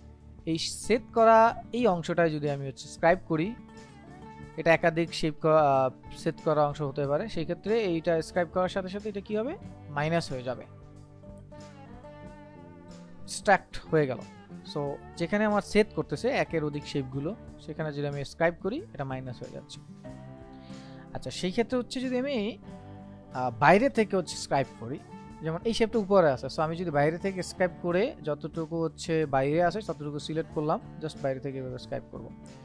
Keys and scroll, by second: 12.1 ctrl+z, 20.4 ctrl+z.